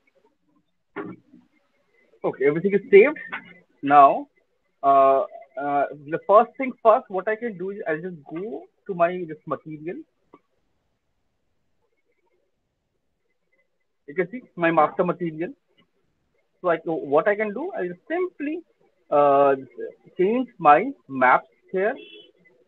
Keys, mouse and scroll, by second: 8.2 click, 9.8 click, 10.0 click, 13.8 click, 13.8-14.9 scroll, 20.3 click, 21.7 click.